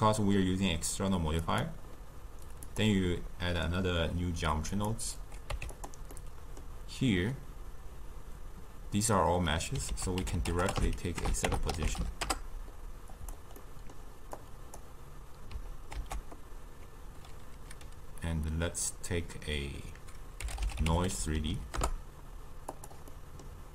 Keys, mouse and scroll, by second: 1.5-4.5 drag, 4.8 click, 5.5 q, 6.2-9.3 middle drag, 10.0 ctrl+a, 11.5 BackSpace, 13.6-14.4 middle drag, 14.4 click, 16.0 ctrl+a, 21.4 Down, 21.5 Down, 23.2-23.7 middle drag.